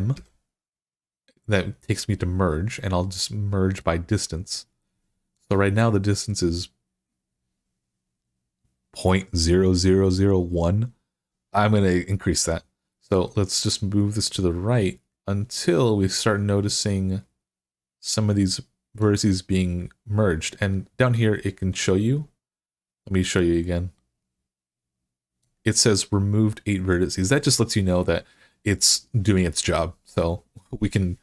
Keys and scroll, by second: 0.0 m.